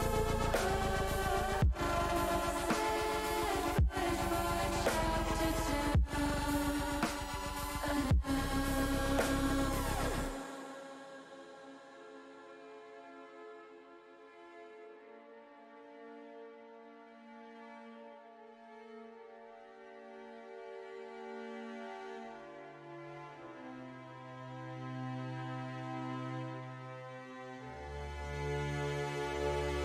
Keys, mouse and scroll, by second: 2.6 shift+middle click, 6.2-7.3 middle drag, 7.9 middle click, 9.1 middle click, 10.7-11.9 drag, 12.3-13.3 middle drag, 13.4 middle click, 14.0 click, 14.6-15.6 drag, 16.3 click, 16.8 click, 18.7 click, 19.5 click, 23.5 click, 24.4-25.8 drag, 26.3 middle click.